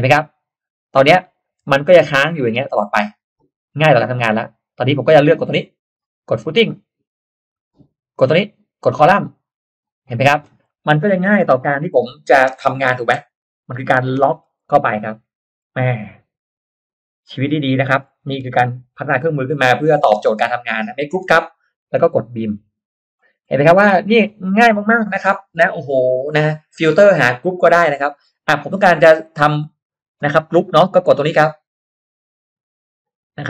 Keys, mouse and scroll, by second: 0.7 click, 1.6 BackSpace, 3.3 click, 3.9 middle click, 5.4 click, 6.5 click, 8.1 click, 9.2 click, 10.0 click, 10.6 middle click, 11.0-12.0 scroll down 2, 11.2 click, 11.9 middle click, 12.5 m, 12.7 click, 12.9 m, 13.8 click, 14.1 click, 14.1 space, 14.4-14.8 scroll up 1, 14.6 middle click, 14.8 scroll down 1, 15.1-15.9 scroll up 2, 15.9 r, 16.8 click, 17.7 click, 18.1 scroll down 1, 18.3 p, 18.6 click, 19.9 click, 20.3 click, 20.3 space, 20.6 click, 21.2 g, 22.6 click, 23.1 click, 23.5 middle click, 23.6-24.3 scroll down 2, 23.7 middle click, 28.5-28.9 scroll up 1, 32.5 click.